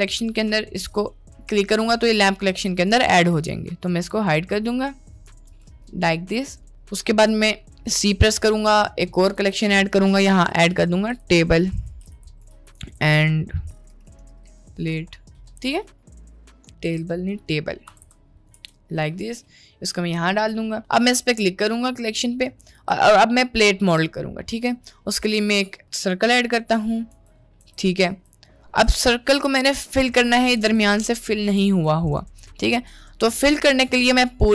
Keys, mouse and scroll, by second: 3.1 drag, 4.1 click, 5.5 click, 8.5 c, 9.5-18.6 drag, 18.0 BackSpace, 22.1 middle click, 22.6 shift+a, 25.5 click, 26.3 Tab, 26.8 middle click, 27.2 Tab, 27.7 Tab, 28.1 Tab, 28.8 Tab, 29.7 middle click, 30.4 click, 30.7 Tab, 31.6 Tab, 32.5 click, 34.4 click.